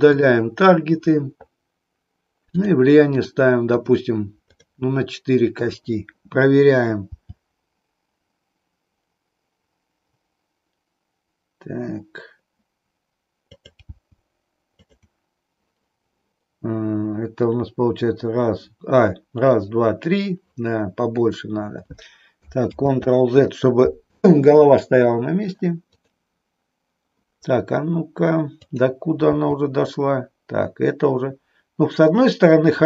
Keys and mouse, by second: 0.1 click, 2.5 click, 3.1 click, 3.9 click, 4.6 click, 7.0 g, 13.9 g, 22.7 ctrl+z, 26.0 click, 28.5 click, 29.4 g.